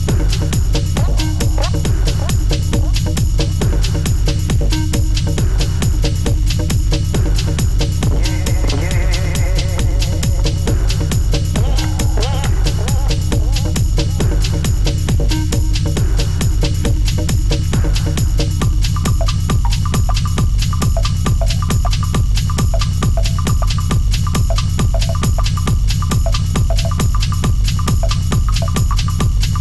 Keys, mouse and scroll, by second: 1.1 click, 2.3 click, 3.1 shift+click, 4.1-6.0 right drag, 6.0 click, 6.6 g, 8.8 click, 11.3 click, 12.2 shift+click, 12.8 g, 17.9 click, 19.0 shift+click, 20.0-21.1 right drag, 21.1 click, 21.6 g, 23.6 shift+click, 24.1 right click, 24.8 click, 25.5 g, 29.5 shift+click.